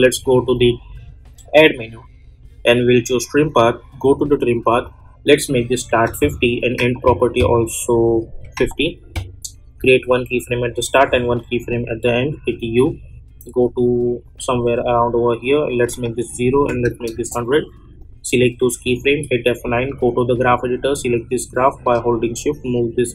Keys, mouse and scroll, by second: 6.6 -, 8.1 click, 12.4 u, 13.6-15.7 drag, 17.1 Return, 17.9 click, 19.0 F9, 19.8-23.1 drag.